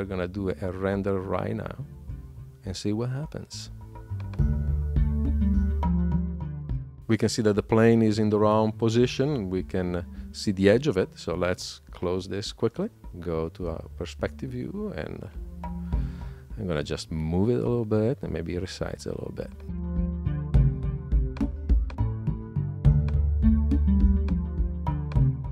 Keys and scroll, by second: 16.0 super+q.